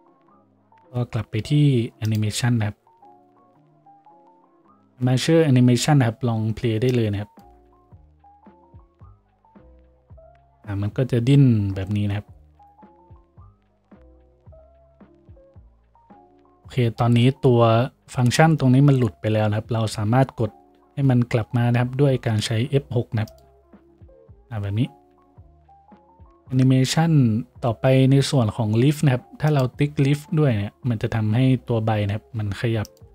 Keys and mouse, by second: 23.6 F6, 23.6-33.1 middle drag.